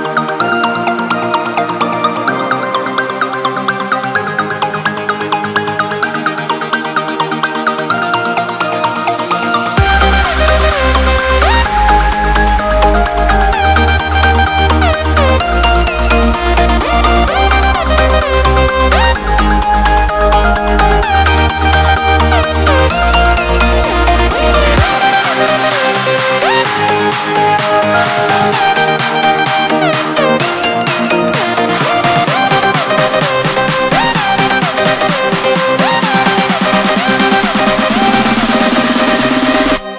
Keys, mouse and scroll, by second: 12.2 f, 12.7 s, 17.7 click, 26.9 right click, 28.5 click, 36.8-37.8 typing, 38.9 BackSpace.